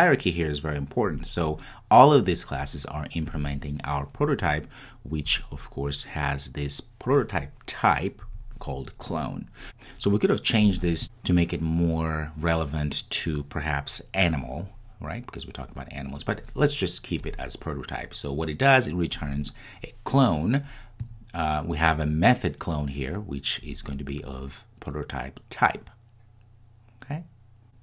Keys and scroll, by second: 0.0 super+s.